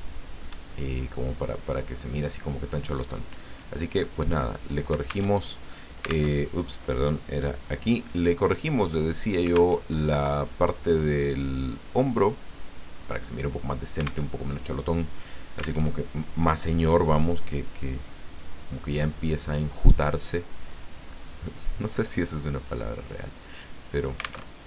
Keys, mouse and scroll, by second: 0.0-1.6 drag, 2.7 click, 3.7-4.9 drag, 5.3 alt+Tab, 6.3 alt+Tab, 7.6 click, 9.7 alt+Tab, 11.1-13.3 drag, 14.3 alt+Tab, 15.8 alt+Tab, 17.0 click, 18.3 click, 19.3-21.1 drag, 21.9-24.5 drag, 24.5 alt+Tab.